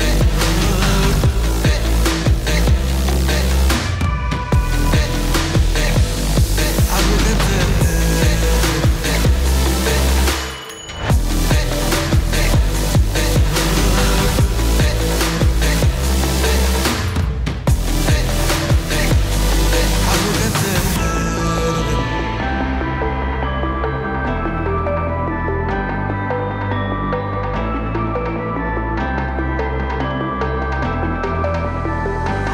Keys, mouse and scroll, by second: 12.1 right click, 12.7 click, 14.1 space, 15.5 typing, 23.2-24.0 drag, 26.7 space.